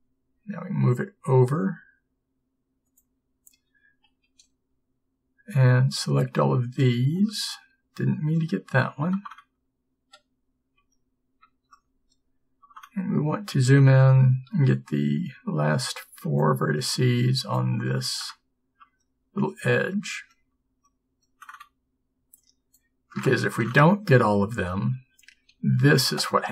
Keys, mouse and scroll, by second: 25.6 b.